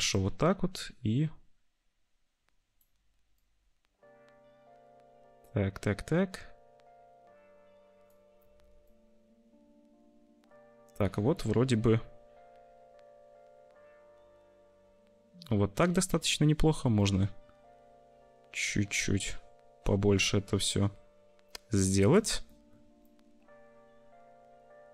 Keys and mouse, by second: 0.1-2.8 drag, 3.4-5.4 drag, 8.5 ctrl+z, 13.2-15.4 middle drag, 16.0 middle click, 16.9-22.2 shift+drag, 22.4 click, 23.0 click, 23.3 middle click.